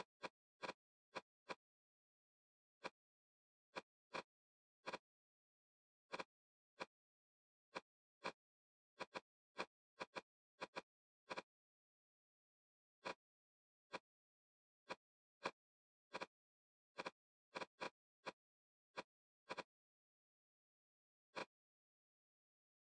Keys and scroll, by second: 0.7 shift+2, 1.0 shift+2, 5.4 m, 8.3 a.